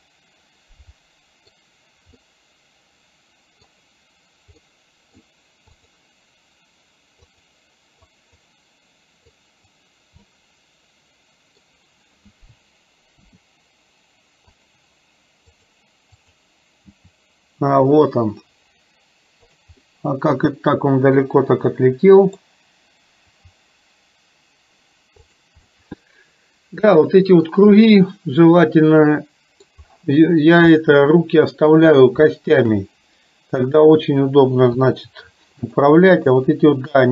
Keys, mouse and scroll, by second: 2.2-3.9 middle drag, 4.7 middle click, 7.4 click, 8.2 click, 9.5 click, 10.4-11.6 middle drag, 13.2 r, 15.5 click, 16.2 click, 17.0 r, 19.9-22.5 middle drag, 23.5 r, 25.7-27.6 middle drag, 28.7-29.9 middle drag, 29.9-30.4 scroll down 1, 30.9-31.7 scroll up 1, 32.4-32.7 shift+middle drag, 33.9 click, 35.0 r, 36.1 click, 36.9 r.